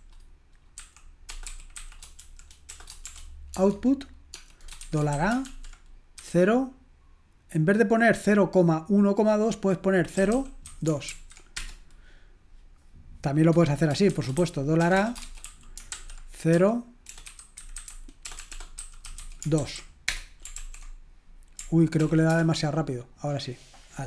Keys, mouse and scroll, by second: 0.0-3.1 typing, 4.3-6.2 typing, 11.6 typing, 15.9-19.6 typing, 20.0 Return, 20.6 ctrl+l, 22.0 ctrl+p, 22.3 Return.